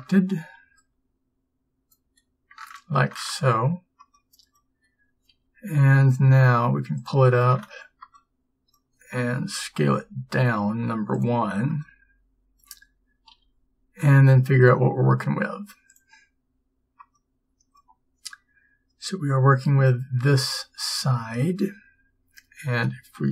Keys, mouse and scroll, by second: 5.4 g, 9.5 s, 13.4 g.